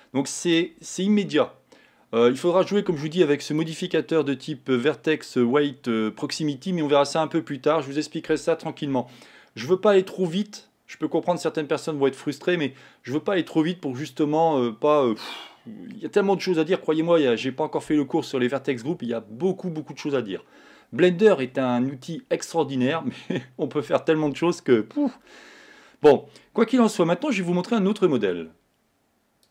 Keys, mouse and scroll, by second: 3.7-6.8 drag, 27.1-29.5 middle drag.